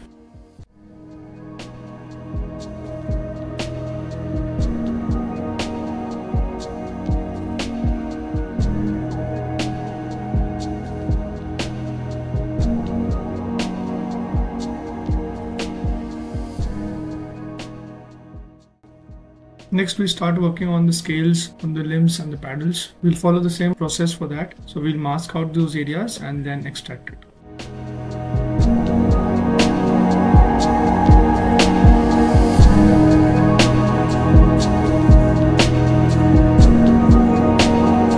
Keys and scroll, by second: 1.6 ctrl+shift+z, 1.9 x, 26.7 ctrl+z, 27.0 s, 30.2 ctrl+shift+z.